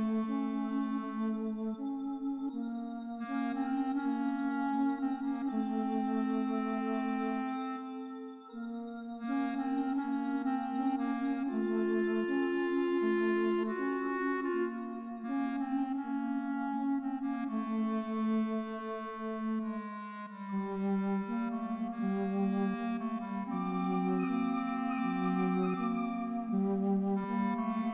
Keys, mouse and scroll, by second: 3.5 right click, 3.7 right click, 4.2 right click, 4.4 right click, 5.4 right click, 5.6 right click, 6.5 right click, 7.0 right click, 7.6 right click, 8.5 right click, 25.1 right click, 27.7 right click.